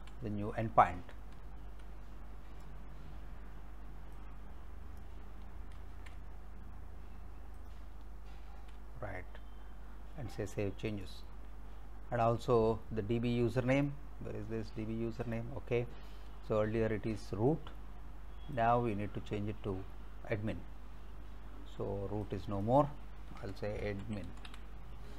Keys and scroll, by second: 0.0 Delete, 1.4 alt+Tab, 5.8 ctrl+c, 8.5 ctrl+v, 23.4-25.0 typing.